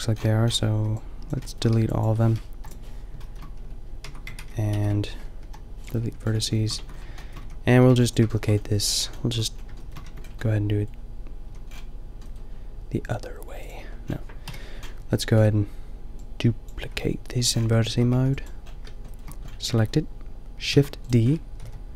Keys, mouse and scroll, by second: 0.7 b, 2.4 Delete, 3.6 Tab, 4.0 Tab, 4.3 ctrl+z, 5.4 Delete, 5.4 ctrl+z, 6.1 Tab, 6.7 Tab, 7.3 a, 7.7 a, 7.9 b, 10.0 Tab, 11.7 a, 13.0 drag, 13.4 click, 13.6 a, 14.4 KP_5, 16.9 Tab, 17.3 a, 18.1 b, 20.7 shift+d, 21.5 g.